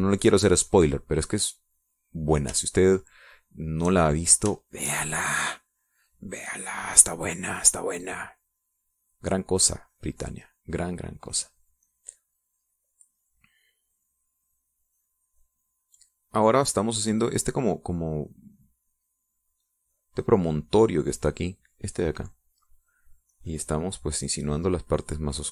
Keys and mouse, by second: 1.7 middle click, 3.8-5.1 shift+drag, 5.7 shift+click, 6.3-8.8 shift+drag, 9.0-11.7 drag, 13.9-22.6 drag, 24.5-25.5 drag.